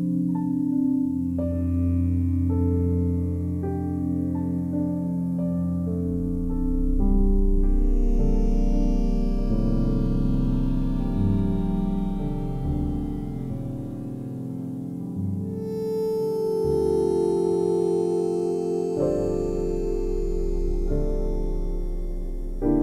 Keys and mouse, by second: 0.7 g, 1.6 click, 2.0 click, 3.0 g, 3.8 click, 4.5 ctrl+alt+click, 5.6 ctrl+alt+click, 6.1 alt+click, 7.7 3, 9.5 alt+a, 9.9 b, 10.1 click, 11.1 g, 11.3 y, 12.4 click, 13.4-14.1 typing, 14.1 click, 15.6 e, 18.4 click, 19.4 s, 20.5 click, 20.8 alt+shift+click, 21.3-22.3 drag, 22.5 g.